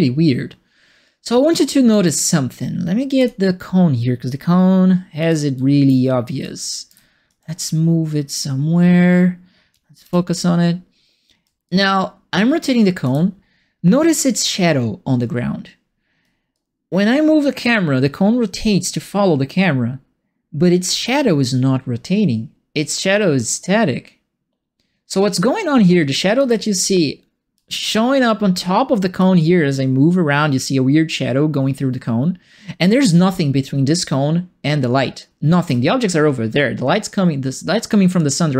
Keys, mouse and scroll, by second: 3.1 click, 5.2 right click, 5.2-7.2 typing, 6.4 right click, 8.2-9.7 drag, 10.0 f, 11.6-13.0 alt+drag, 16.5-26.3 alt+drag, 29.3-35.5 alt+drag.